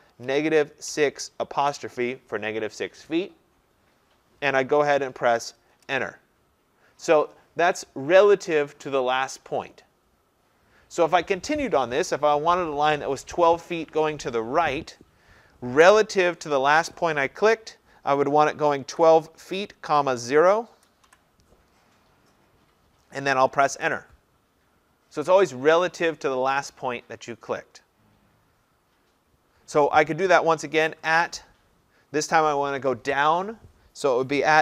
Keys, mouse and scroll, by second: 0.0-1.7 typing, 5.8 Return, 7.7 Return, 16.5 typing, 18.6-21.9 typing, 23.7 Return, 27.1 Return, 31.0 typing.